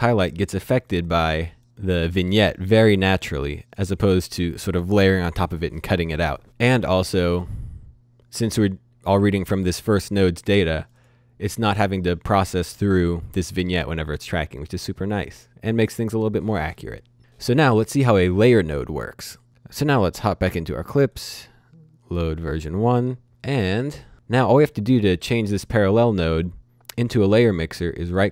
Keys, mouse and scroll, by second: 0.3 click, 3.5 click, 7.2 click, 9.3 click, 19.5 click, 20.3 click, 20.8 right click, 21.9 click, 23.6 click, 25.3 click, 28.0 right click.